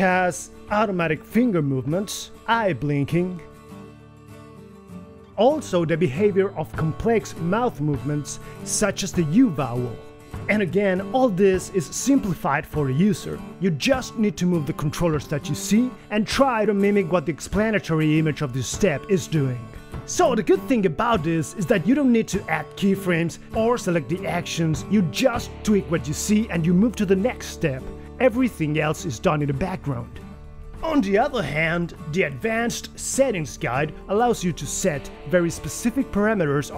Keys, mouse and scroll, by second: 0.0-1.7 typing, 6.2-8.0 typing, 9.2-14.4 typing, 19.3 g, 20.1 KP_1, 22.0 KP_1, 22.2 g, 24.3 shift+KP_1, 25.1 g, 28.7 g, 29.1 g, 29.8 KP_1.